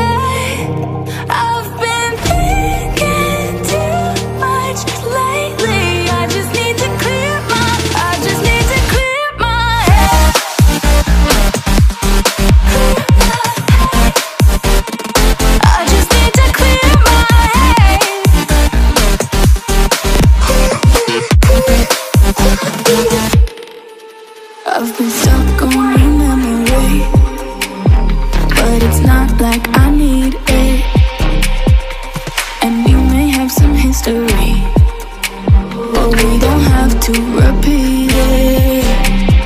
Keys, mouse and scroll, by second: 13.3 click, 18.4 click, 23.6 ctrl+Num_Lock, 23.9 ctrl+click, 27.7-28.4 typing, 30.1 alt+Delete, 34.5 click, 36.5 click.